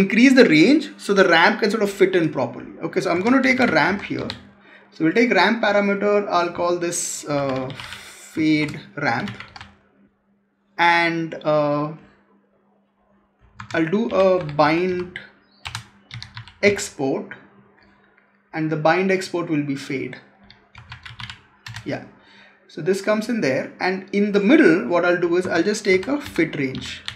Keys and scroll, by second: 3.0 Tab, 13.4 Tab, 25.3 Tab.